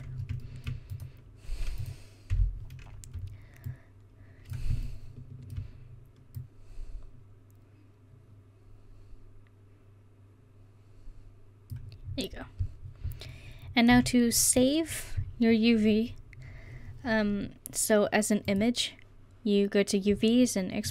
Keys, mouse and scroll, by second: 1.0 click, 2.4 l, 5.5 middle click, 10.0-12.1 middle drag, 14.2 a.